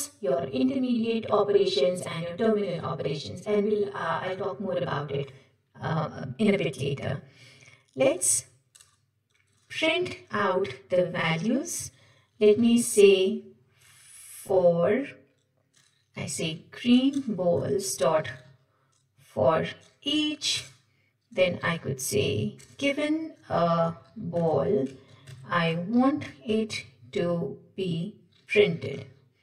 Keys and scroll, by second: 17.2 Return, 20.5 Return, 27.5 Tab.